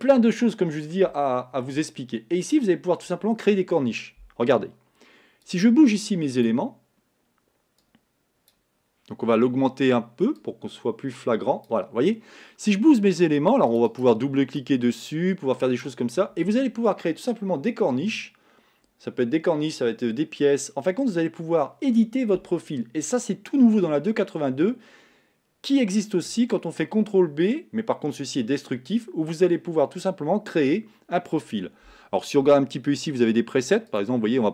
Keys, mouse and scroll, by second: 1.9 scroll up 1, 2.5-6.7 middle drag, 6.7-14.2 drag, 15.8-34.5 drag.